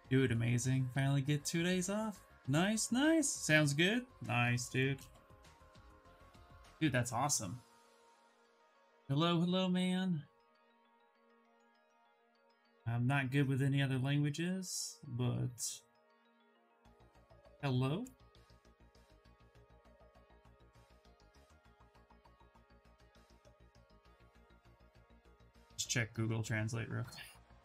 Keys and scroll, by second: 5.7 f, 18.7 ctrl+c, 23.2 g, 23.5 o, 24.3 g, 24.6 l.